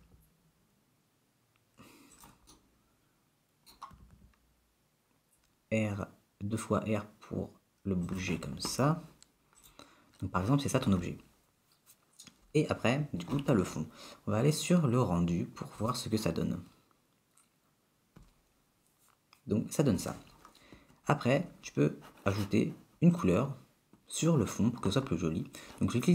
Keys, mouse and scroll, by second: 0.3 g, 2.8 middle click, 4.2 r, 9.7 click, 18.1 click, 23.2 click.